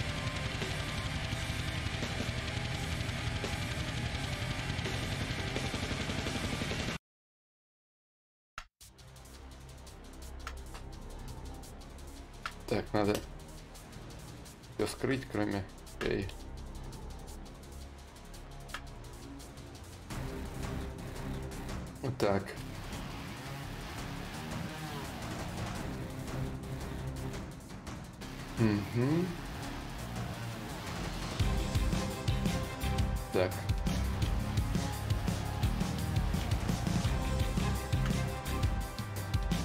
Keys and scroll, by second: 10.6 shift+d, 11.2 shift+d, 19.6 d, 22.2 b, 23.4 b, 24.2 d, 24.5 i, 37.0 ctrl+z, 38.0 d.